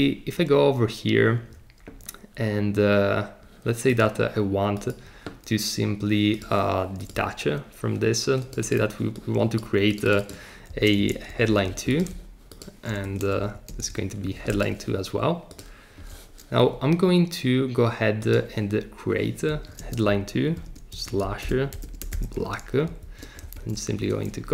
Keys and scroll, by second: 11.0 space, 11.3 2, 13.0 Return, 13.4 Right, 13.7 space, 13.9 2, 19.5 Right, 19.8-22.7 typing, 23.0 shift+Up, 23.5 super+c, 23.9 Return.